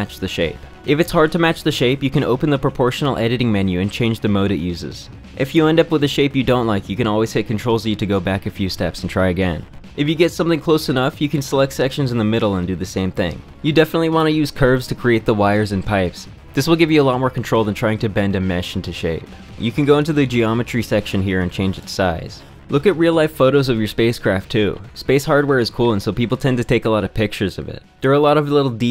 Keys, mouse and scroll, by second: 3.3-8.8 drag, 10.8 shift+click, 12.3 Tab, 13.2 click, 14.4-17.8 typing, 14.5 Tab, 15.4 Tab, 15.5 click, 15.7 Tab, 16.1 Tab, 16.6 ctrl+z, 18.2 ctrl+w, 18.3 ctrl+b, 18.4 Tab, 18.4-20.4 drag, 21.2 click, 22.5 shift+click, 23.2-24.2 drag, 24.7 middle click, 25.1 click, 26.4 middle click.